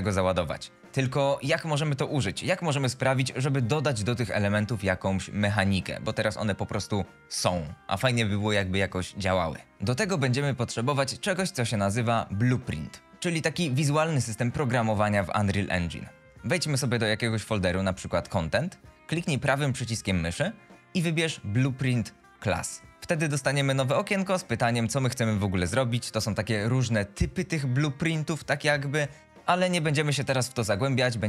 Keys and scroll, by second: 0.0-0.4 typing, 1.0 Delete.